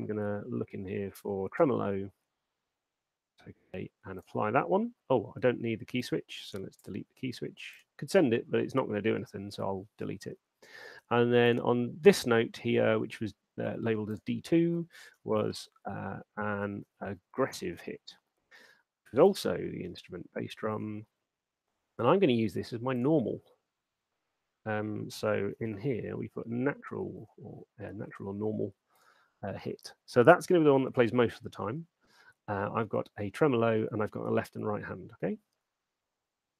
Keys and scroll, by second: 7.0 BackSpace, 14.8-16.1 typing, 18.2-18.9 typing, 25.5-26.4 typing.